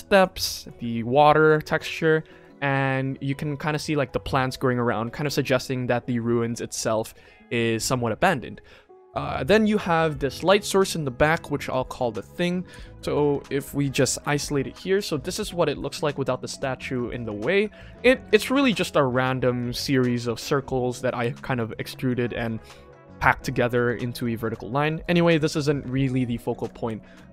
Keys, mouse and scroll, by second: 0.1 click, 0.5 click, 1.4 click, 1.9-2.3 shift+middle drag, 5.1 shift+middle drag, 10.0 click, 11.5 click, 11.8-12.7 right drag, 14.9 click, 15.3-15.7 middle drag, 16.0-16.8 middle drag, 17.5 shift+middle drag, 17.8-18.2 middle drag, 18.2 KP_1, 18.6 shift+middle drag, 19.1-19.4 scroll up 1, 19.5-19.8 shift+middle drag, 21.0 middle drag, 22.0 middle drag, 22.5 scroll up 2, 23.4 middle drag, 23.7 scroll down 2, 24.1 KP_1, 24.3 scroll down 1, 24.7 shift+middle drag, 25.3 ctrl+s, 26.5 click.